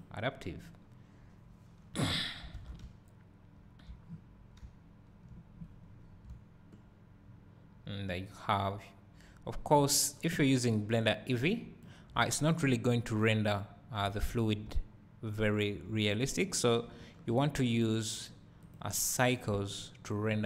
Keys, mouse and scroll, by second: 0.4-8.6 drag, 2.6 alt+a, 2.8 `, 4.1-4.6 scroll down 2, 4.6 `, 6.0 scroll up 2, 6.3 `, 8.7 click, 9.8 click, 10.5 click, 12.2 `, 12.8-20.4 drag, 14.3-14.7 scroll up 2, 14.7 `.